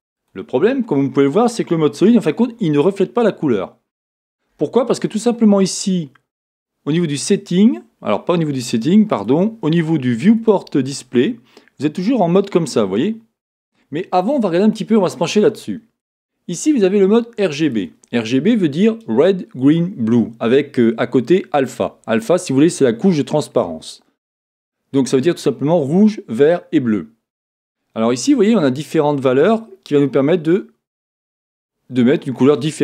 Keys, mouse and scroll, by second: 3.8 scroll down 1, 9.1 click, 10.3 click, 11.0-14.2 scroll down 1, 14.6 click.